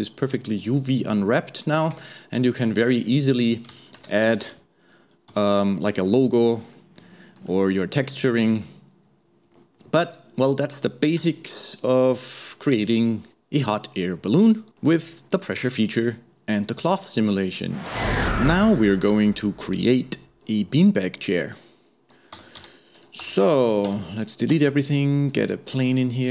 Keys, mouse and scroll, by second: 2.2 Tab, 4.0 shift+Left, 4.4 space, 5.4 space, 6.8-11.2 middle drag, 11.2 KP_1, 11.9-14.6 scroll up 1, 23.0 click, 24.6 shift+a, 25.8 s.